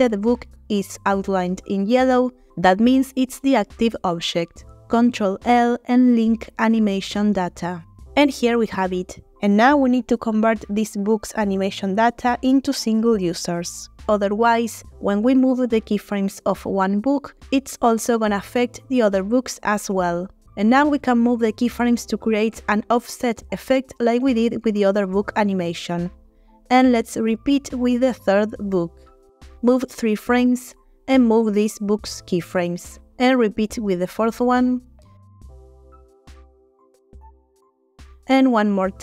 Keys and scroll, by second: 5.1 ctrl+l, 23.0 Right, 23.4 Right, 25.1 Right, 27.0 g, 29.3 Right, 29.5 Right, 29.7 Right, 31.6 g, 35.5 Right, 35.7 Right, 35.8 Right, 36.6 g, 38.8 Right, 38.9 Right.